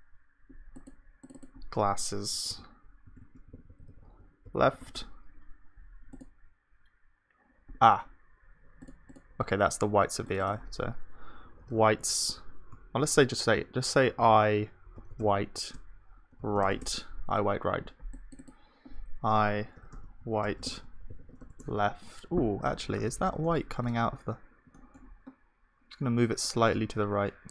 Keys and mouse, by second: 3.2 click, 3.2 BackSpace, 3.7 s, 3.8 s, 7.6 click, 22.9-26.7 middle drag, 26.7 g.